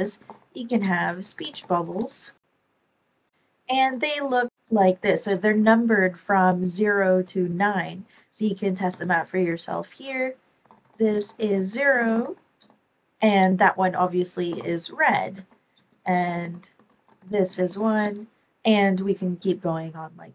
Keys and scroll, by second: 0.0-1.2 typing, 3.6 Return, 4.2-4.8 typing, 7.2 0, 8.8 space, 10.3-12.6 typing, 13.8-17.7 typing, 15.3 super+Right.